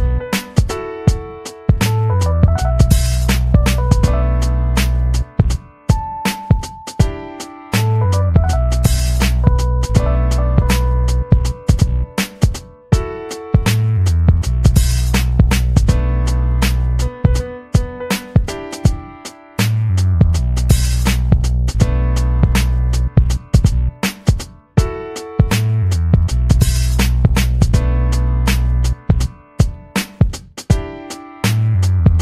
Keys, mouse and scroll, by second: 0.0-0.4 scroll down 2, 1.1 scroll down 2, 1.4 click, 1.6-2.5 scroll down 2, 2.7 scroll down 2, 3.5-6.0 drag, 6.2-7.8 drag, 7.9 click, 9.0 ctrl+z, 9.7 click, 9.9 click, 10.9 ctrl+z, 11.2 click, 11.6 click, 12.5 scroll down 1, 13.1 click, 13.9 scroll down 1, 14.3-15.4 drag, 15.4 scroll down 1, 18.7 click, 19.0-20.0 typing, 25.7 click, 26.1-27.1 drag, 27.3-27.6 scroll up 4, 27.8 click, 28.5 scroll up 2, 28.8 click, 29.6 click, 30.0 click, 30.7 click, 31.0 scroll up 2, 31.2 click, 32.1-32.2 scroll up 6.